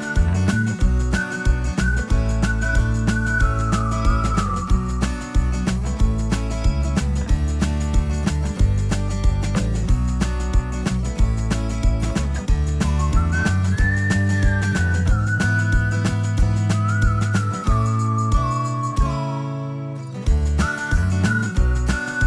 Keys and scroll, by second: 1.3 ctrl+a, 2.2 ctrl+c, 3.0 Escape, 9.0 ctrl+v, 9.6 Escape.